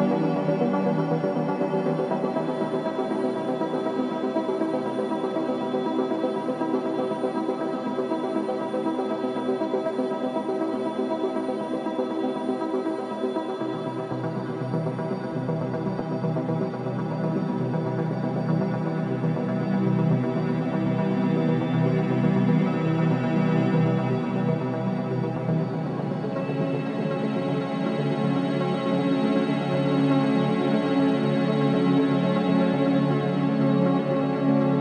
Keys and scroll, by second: 4.0 ctrl+z, 4.4 Escape, 4.5 ctrl+z, 20.8 ], 31.5 4, 33.8 3.